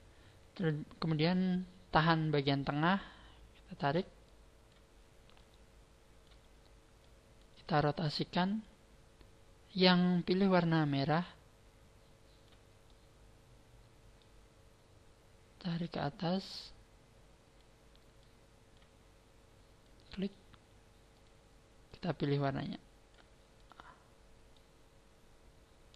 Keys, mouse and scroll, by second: 2.7 shift+middle click, 4.2 click, 5.4 click, 7.0 click, 8.4 click, 10.8 click, 12.8 middle click, 15.6 click, 16.4 click, 18.2 click, 19.8 click, 21.1 click, 23.6 click, 24.5 middle click.